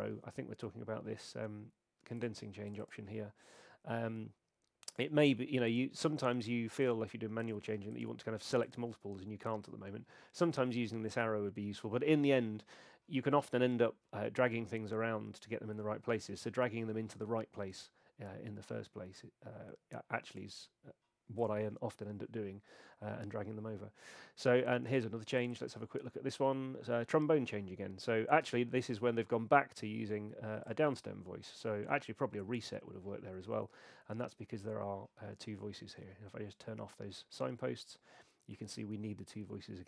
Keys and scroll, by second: 36.0 alt+super+s.